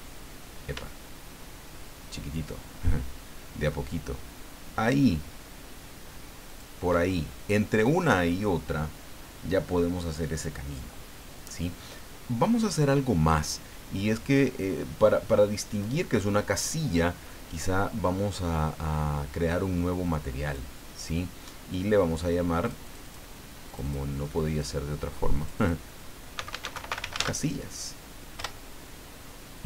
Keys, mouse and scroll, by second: 6.5 shift+click, 7.2-7.5 shift+scroll down 3, 8.4-11.6 drag, 15.7 click, 20.5 click, 22.6 click, 23.7 click, 24.5 click, 25.4 click, 26.1-27.6 typing, 28.4 Return.